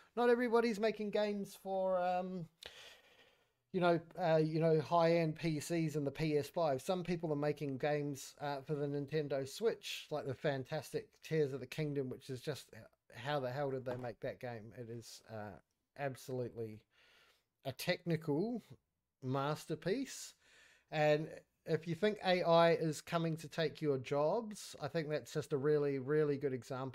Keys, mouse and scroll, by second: 12.3 scroll down 2, 12.6-13.0 scroll up 4, 13.0 scroll down 1, 13.2 middle click, 13.8-14.9 middle drag, 15.9 scroll down 1, 16.4 middle click, 18.8-19.2 scroll up 2, 19.2-19.5 middle drag.